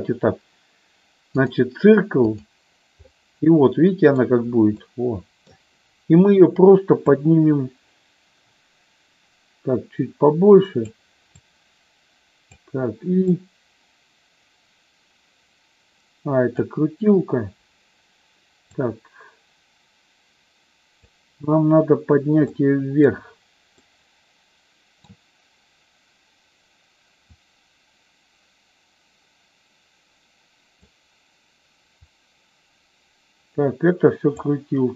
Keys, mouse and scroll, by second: 2.4 click, 3.1-4.4 middle drag, 5.0 middle click, 7.0-10.9 drag, 11.4-12.6 drag, 13.3-16.9 drag, 18.7-21.0 drag, 22.6 middle click, 24.0-25.2 middle drag, 27.2-30.8 drag, 32.0-34.6 drag.